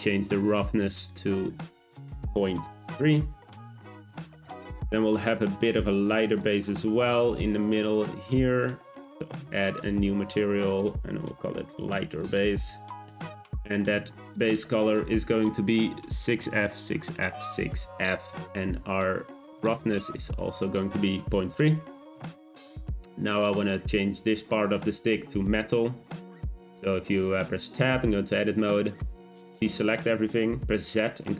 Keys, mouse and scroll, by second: 1.7 click, 7.8 click, 9.3-13.7 drag, 14.2 click, 20.4 click, 27.5 Tab, 29.3 click, 30.6 z.